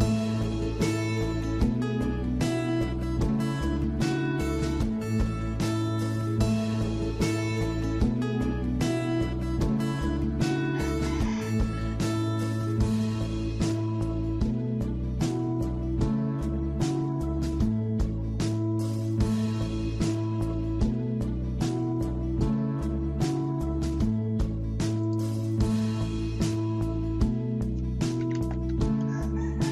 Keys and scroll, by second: 28.0-29.7 typing.